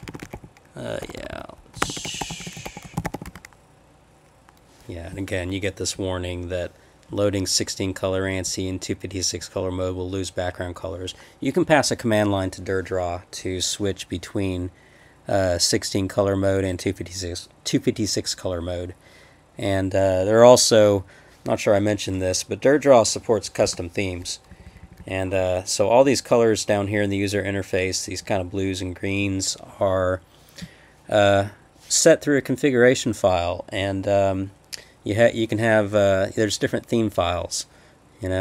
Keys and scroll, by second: 2.0-3.3 typing, 23.7 Return, 24.5 Page_Up, 24.6 Up, 24.8 Up, 25.0 Up.